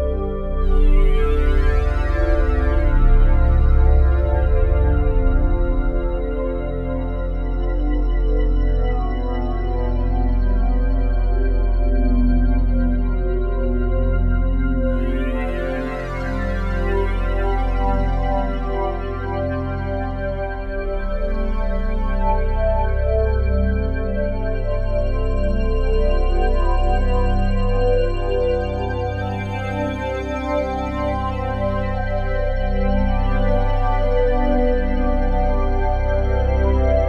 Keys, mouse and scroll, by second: 7.5-9.0 drag, 9.8 click, 12.8 click, 15.1 s, 16.2 Escape, 17.9-22.6 drag, 22.6 i, 23.8-25.7 drag, 25.7 Right, 25.9 Right, 26.1 Right, 26.3-27.4 Right, 31.0-31.8 typing, 31.0 Right, 33.6-37.0 drag.